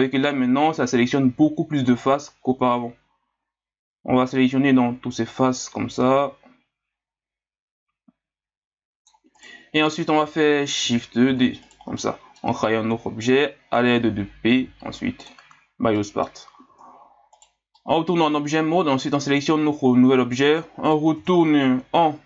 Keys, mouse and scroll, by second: 11.3 shift+d, 12.0-13.2 middle drag, 13.2-14.5 drag, 14.5 p, 15.8 scroll down 1, 16.0 middle click, 16.7 Tab, 17.3 right click, 17.8-18.9 middle drag, 18.9 right click, 19.4-21.1 middle drag, 21.1 Tab.